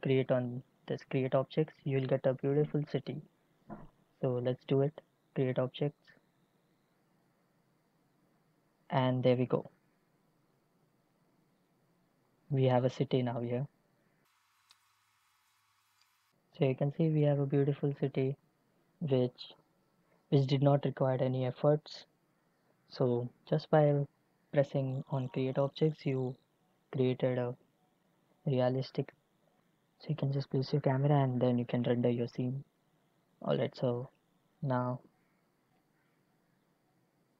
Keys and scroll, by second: 34.7 a.